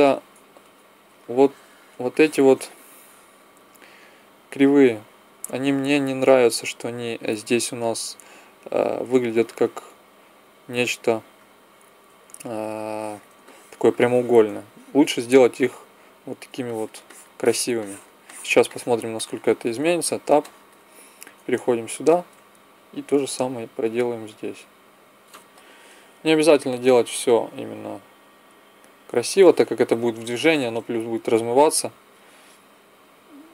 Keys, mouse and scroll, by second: 0.6 Tab, 4.5-6.0 drag, 8.6-10.3 drag, 12.2 KP_1, 18.0 middle click, 19.9 Tab, 21.4 Tab, 22.7 right click.